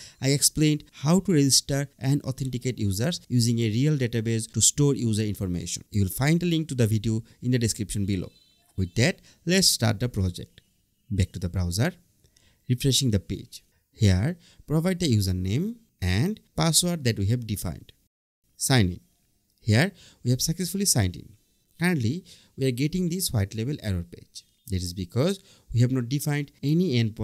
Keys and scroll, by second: 13.4 Escape, 15.8 Tab.